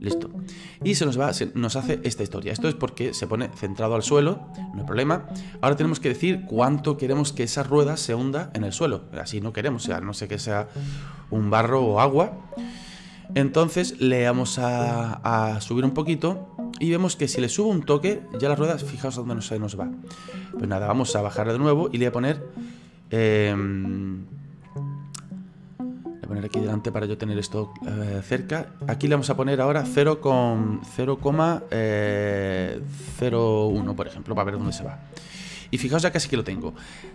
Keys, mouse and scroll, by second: 1.1 middle click, 2.0 scroll up 4, 2.4 scroll down 2, 2.8-16.0 middle drag, 16.0 click, 18.0-19.4 scroll down 8, 19.4-19.8 scroll up 4, 19.8-21.4 scroll down 2, 21.4 click, 22.5-23.1 scroll up 4, 23.1-27.2 drag, 27.2-28.9 scroll up 4, 28.9-32.0 drag.